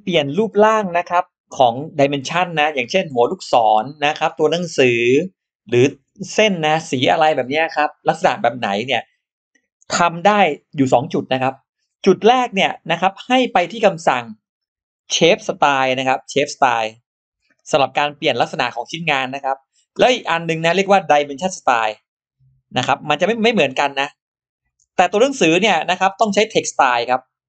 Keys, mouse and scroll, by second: 14.3 click, 15.9 shift+x, 16.2-17.5 drag, 18.2 click, 19.0 click, 21.3-23.2 drag, 23.7 click, 24.5 click, 26.3-27.4 drag.